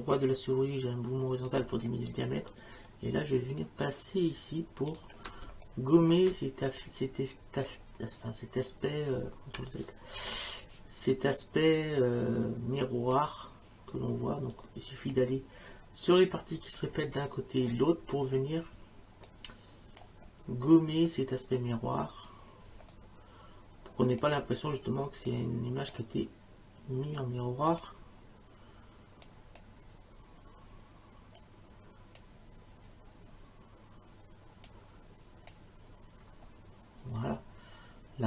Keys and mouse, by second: 2.5 click, 4.9 click, 5.4 space, 5.7 click, 6.8 click, 10.2 ctrl+z, 11.1 click, 12.8 click, 14.5 click, 19.3 click, 22.7 space, 22.9 click, 24.2 space, 25.3 click, 27.2 click, 29.2 click, 31.4 click, 34.7 click.